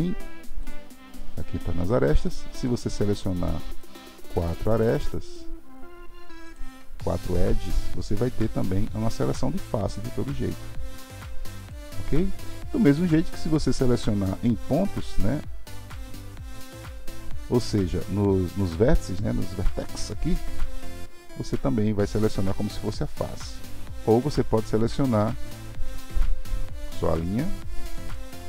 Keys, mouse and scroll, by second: 0.7-2.7 drag, 3.8 shift+click, 5.2 shift+click, 8.6 g, 13.9 click, 24.5 click, 25.6 shift+click, 27.0 g.